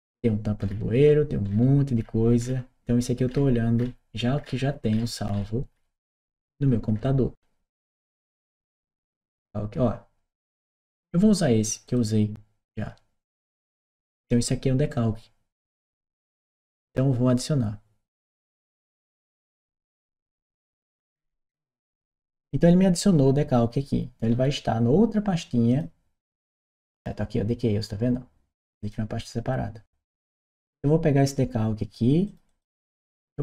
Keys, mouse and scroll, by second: 0.4-9.5 middle drag, 11.6 click, 18.3 click, 22.2 click, 28.6 click, 32.0 click, 32.3-33.4 drag.